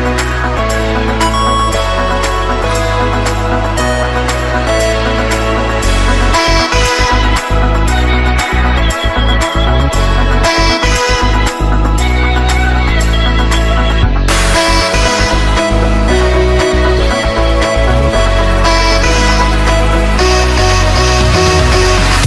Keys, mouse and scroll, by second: 0.1 F2, 0.5-2.2 typing, 2.8-8.3 drag, 8.3-19.4 drag, 19.5 F11, 19.5 F10, 19.7 right click, 22.1 click.